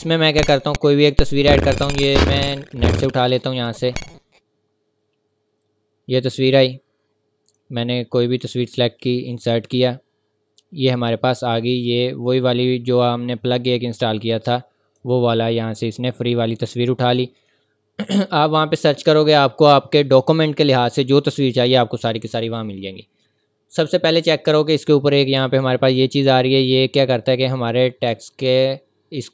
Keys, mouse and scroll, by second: 2.7 click, 8.3 click, 12.3 click, 12.3-14.3 scroll down 1, 14.3 click, 15.2-15.7 scroll up 1, 15.7 scroll down 1, 17.1 click, 23.5-23.8 scroll up 1, 23.8 scroll down 1, 24.4 scroll up 1.